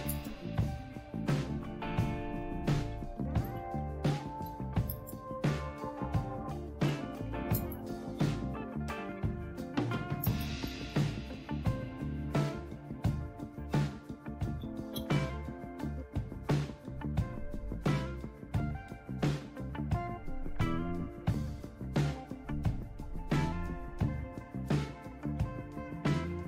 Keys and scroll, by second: 0.0-9.1 typing, 10.2-15.4 typing, 16.3 Return, 22.7 Up.